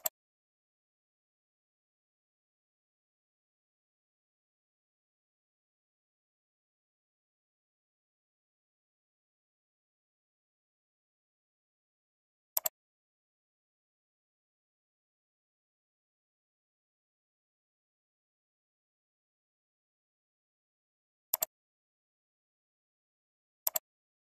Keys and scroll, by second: 0.5 alt+Return, 2.2 ctrl+v, 3.9 alt+Return, 5.0 ctrl+v, 6.2 alt+Return, 7.4 ctrl+v, 9.2 alt+Return, 10.2 ctrl+v, 24.1 ctrl+c.